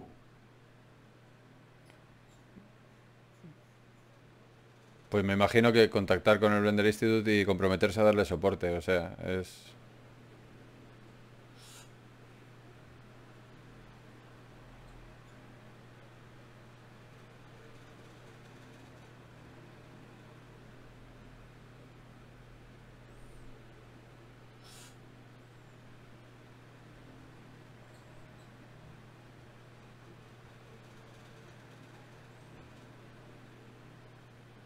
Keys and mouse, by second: 15.6-17.0 middle drag, 23.8 ctrl+Tab, 27.4-29.2 drag, 28.6 g, 29.6 g, 30.0-32.2 drag, 30.8 g, 32.8 ctrl+Tab, 34.2-34.6 drag.